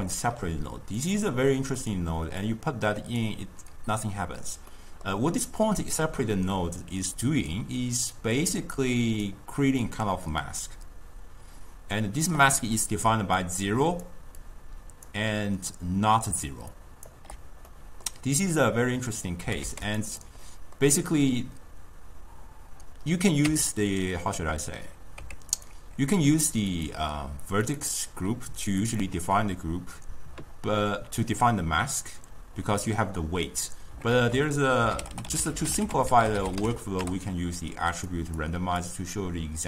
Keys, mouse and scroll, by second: 1.8-2.5 middle drag, 2.5-4.8 drag, 4.8-7.8 middle drag, 8.4-11.6 drag, 13.1-17.2 typing, 13.5 click, 13.8 click, 14.6 click, 15.8 click, 16.8 click, 17.8-18.7 middle drag, 18.7-19.5 drag, 19.5 g, 20.2-20.5 drag, 20.5-23.5 middle drag, 23.5 Tab, 25.3 Tab, 25.6 click, 26.8-27.8 drag, 28.9 click, 34.2 ctrl+a, 35.2 t, 38.4-39.6 drag.